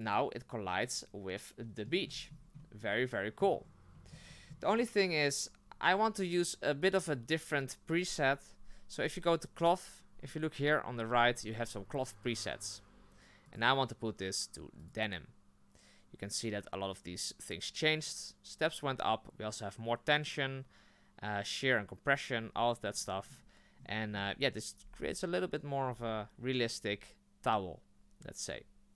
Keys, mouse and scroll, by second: 0.8-2.1 middle drag, 2.1-2.5 scroll up 6, 2.6-3.4 middle drag, 3.4-3.9 scroll down 5, 3.9-4.7 shift+middle drag, 4.7 right click, 14.9-28.9 drag.